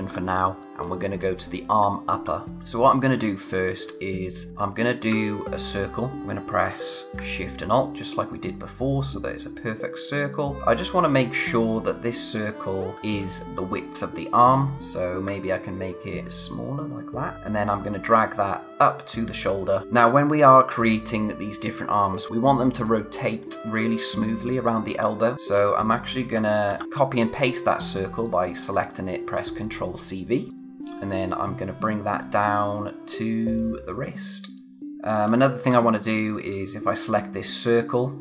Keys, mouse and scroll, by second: 0.0-0.4 scroll down 1, 0.4 space, 0.6 click, 0.8 space, 1.1 click, 2.2-2.6 scroll up 1, 2.6 click, 5.2 alt+click, 10.6 click, 13.1-14.4 scroll up 1, 14.8 click, 16.2 shift+click, 17.3-17.7 scroll down 1, 17.7 click, 19.8 space, 25.0-25.3 scroll up 1, 25.3 space, 26.6 ctrl+c, 26.8-28.2 scroll down 1, 28.2 click, 30.5 scroll down 1, 30.8 space, 31.1-32.4 scroll up 1, 32.4 click, 35.1 space, 35.3-36.0 scroll up 1, 36.0 click.